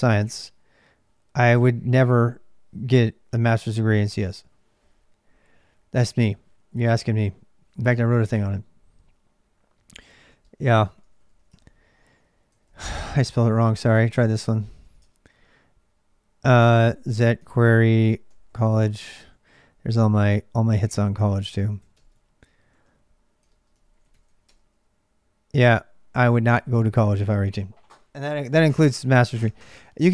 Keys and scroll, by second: 0.0-30.1 typing, 14.8 Return.